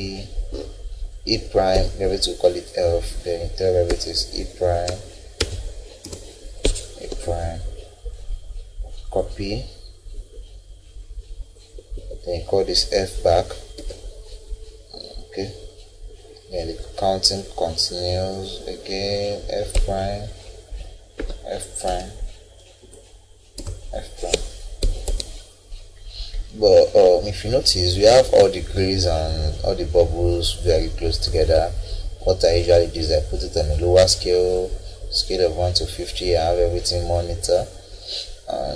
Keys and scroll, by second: 1.7 Escape, 3.9 e, 4.9 ', 6.0 BackSpace, 7.1 Escape, 11.9 Escape, 13.8 f, 19.8 Escape, 21.2 f, 21.9 ', 23.6 BackSpace, 24.8 Escape.